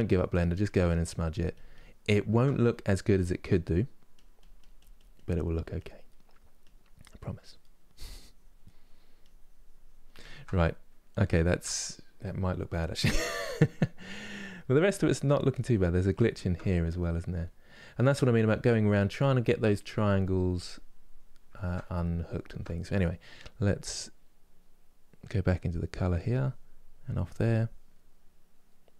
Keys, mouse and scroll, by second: 1.8-3.8 shift+middle drag, 3.8-5.7 drag, 5.7 middle click, 6.3-7.3 drag, 7.3 middle click, 7.7 click, 8.3 middle click, 8.9-10.0 drag, 10.0-17.6 ctrl+middle drag, 17.6 click, 18.5 middle click, 19.1-21.2 drag, 21.2-25.8 ctrl+middle drag, 25.8-27.6 drag, 27.6-28.9 middle drag.